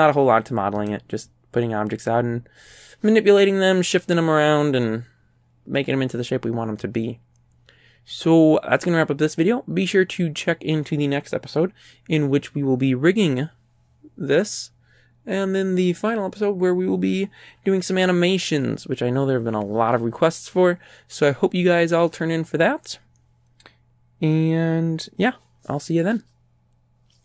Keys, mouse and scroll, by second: 0.0 scroll up 1, 0.8 right click.